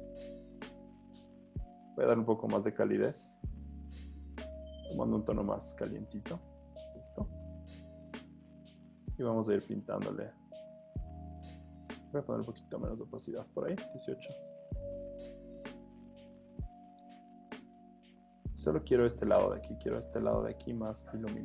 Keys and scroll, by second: 9.9 super+z, 13.7 Return.